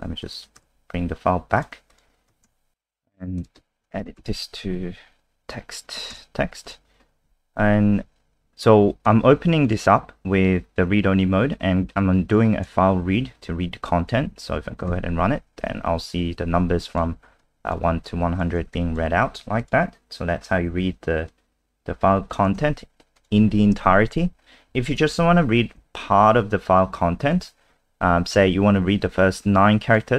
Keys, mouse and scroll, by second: 0.2 click, 0.6 ctrl+z, 1.5 click, 1.9 click, 2.4 ctrl+s, 2.7 click, 4.0-6.0 typing, 6.1 ctrl+s, 6.6 click, 14.9 F5, 16.5 alt+click, 17.4 alt+click, 18.0 alt+click, 18.7 alt+click, 19.6 click, 20.3-21.3 scroll down 3, 21.3 click, 22.6 ctrl+c, 23.1 click, 24.3 shift+Home, 24.7 shift+Up, 24.8 shift+Up, 25.0 shift+Up, 25.1 shift+Up, 25.8 shift+Up, 27.3 ctrl+v, 29.3 click.